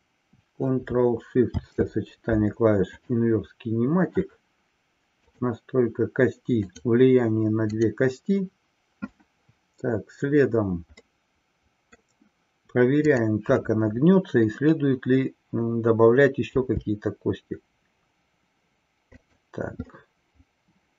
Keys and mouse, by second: 3.5 ctrl+shift+c, 5.2 click, 7.1 click, 7.8-8.5 drag, 11.0-12.1 middle drag, 19.9-20.9 middle drag.